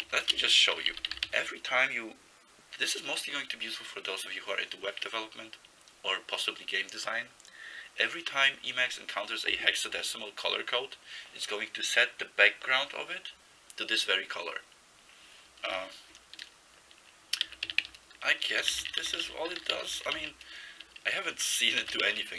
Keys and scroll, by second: 0.0-1.8 typing, 15.7 Return, 17.3-20.4 typing, 21.8 ctrl+c, 22.1 typing.